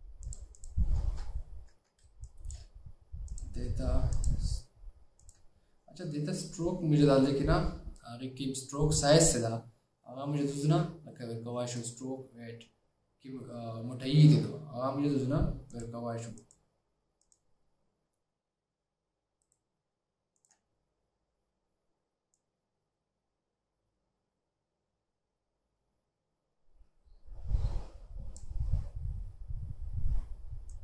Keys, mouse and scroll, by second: 1.2 alt+scroll down 1, 1.9 alt+scroll down 1, 2.1 space, 3.7 space, 4.3 shift+click, 5.6 shift+click, 19.5 right click.